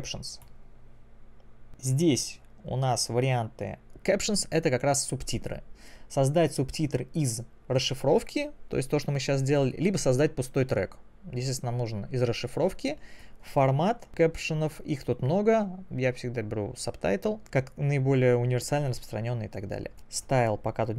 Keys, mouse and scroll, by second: 0.5 click.